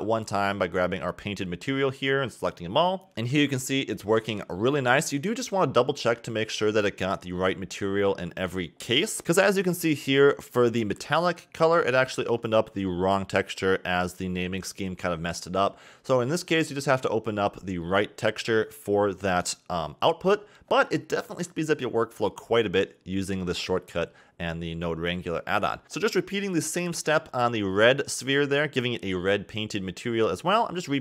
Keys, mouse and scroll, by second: 0.8 a, 1.0 a, 1.2 scroll up 4, 2.6 click, 3.3-3.8 middle drag, 3.8 click, 4.7 click, 5.0 x, 5.7 click, 6.1 x, 6.3 scroll up 3, 6.8 middle click, 7.1 scroll up 4, 7.6-8.0 middle drag, 9.5-10.5 middle drag, 10.5 click, 13.1 click, 15.1-18.2 drag, 19.0 click, 24.4 scroll up 1, 24.5-26.0 scroll down 3, 24.6 middle click, 26.1 click, 27.2-28.7 middle drag, 28.7 click, 28.7 click, 29.4 click, 30.3 click.